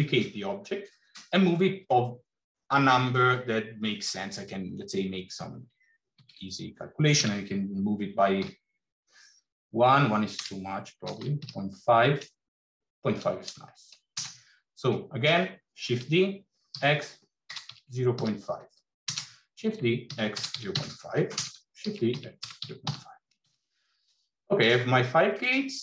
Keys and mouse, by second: 6.1 shift+d, 15.8 shift+d, 19.4 shift+d, 24.4 click.